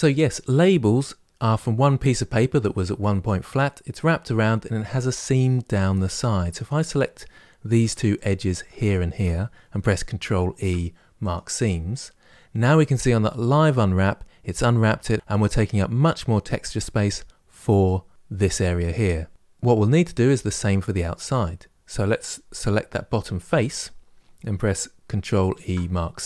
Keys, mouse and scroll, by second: 6.3 click, 7.6 2, 8.0 click, 8.7 shift+click, 11.1 ctrl+e, 19.3-22.9 middle drag, 22.9 3, 23.5 click.